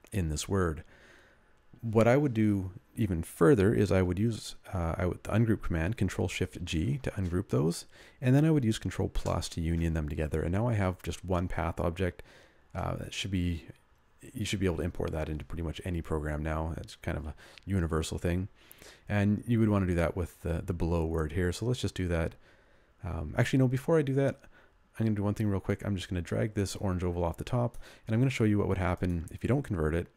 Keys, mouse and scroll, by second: 9.1 ctrl+[.